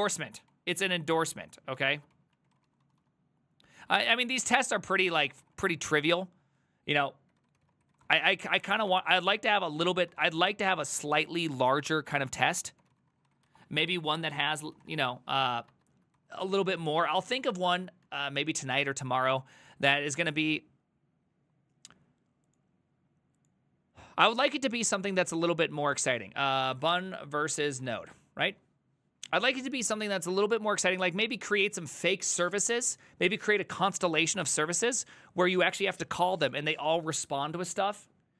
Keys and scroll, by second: 0.5 ctrl+c, 0.6 ctrl+c, 1.8 ctrl+a, 2.0-18.3 typing, 2.2 ctrl+c, 10.7 ctrl+c, 12.0 ctrl+a, 12.0 ctrl+c, 12.2 ctrl+c, 15.5 ctrl+c, 15.8 alt++, 16.2 ctrl+t, 19.4 Return, 26.5-28.5 typing.